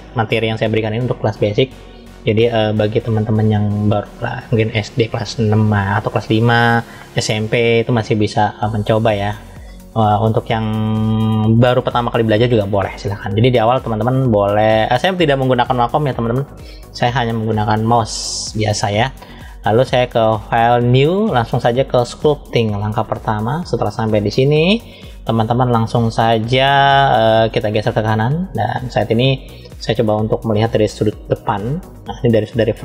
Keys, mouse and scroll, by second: 19.6-23.0 drag, 26.5-28.4 drag, 31.1 KP_1.